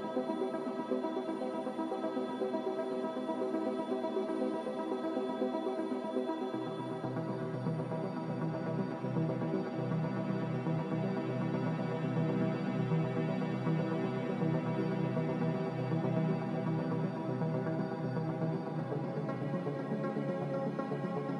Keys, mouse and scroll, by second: 0.9 z, 3.1 z, 4.9-5.8 typing, 9.7 Return.